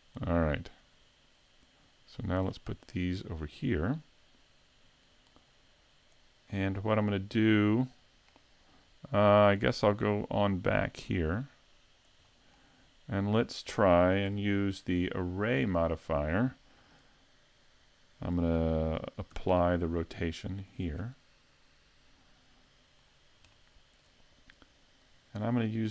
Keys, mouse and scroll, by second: 2.5-2.8 scroll down 5, 2.8 middle click, 5.4 click, 6.9 middle click, 9.8 click, 12.3 middle click, 14.3 n, 19.3 ctrl+a, 23.0 scroll up 2, 23.5 shift+middle click, 25.0 click.